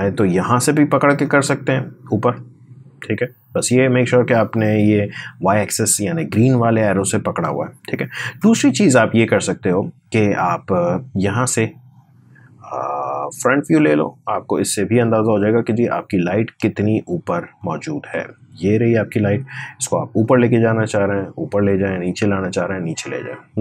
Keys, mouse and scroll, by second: 1.0-6.5 drag, 10.6 click, 14.9 scroll down 1, 15.5 space, 15.7 click, 16.0 space, 16.6-17.2 scroll up 1, 17.2 space, 17.4 click, 17.7 space, 18.5-23.6 drag.